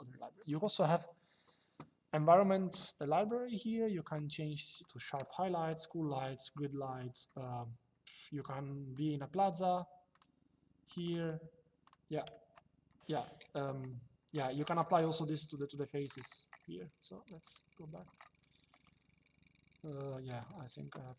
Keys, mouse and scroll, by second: 0.1 click, 3.8 click, 8.6 click, 9.8 click, 12.0 Escape, 14.8 shift+middle click, 17.1 click, 18.4 click, 20.1 click.